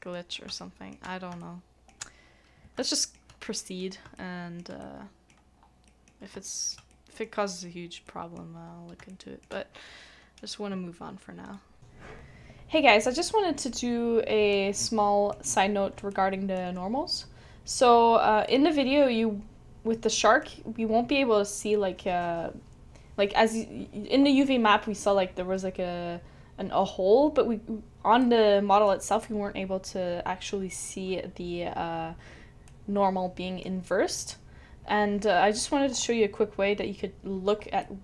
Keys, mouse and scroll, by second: 0.2 scroll down 1, 0.6 shift+middle click, 1.4 shift+middle click, 2.8 shift+middle click, 3.5 shift+middle click, 4.1 shift+middle click, 4.8 shift+middle click, 5.5 scroll down 1, 5.6 scroll up 1, 5.8 scroll down 1, 5.8 middle click, 6.4 shift+middle click, 6.9 shift+middle click, 8.6 scroll up 1, 9.1 shift+middle click.